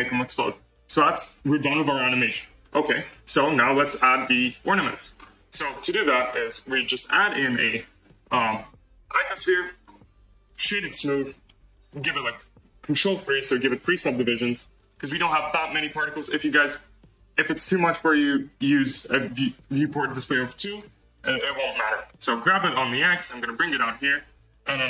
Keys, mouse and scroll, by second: 1.2-2.6 scroll up 2, 2.6-3.3 scroll down 1, 3.5 scroll down 1, 4.3-5.1 middle drag, 5.1-5.4 scroll down 1, 5.5 space, 6.6 shift+a, 10.4 right click, 10.9 right click, 12.0 shift+3, 13.1 ctrl+3, 14.4 click, 14.7 click, 16.5-19.9 drag, 19.9 scroll, 22.0 g, 24.6 click.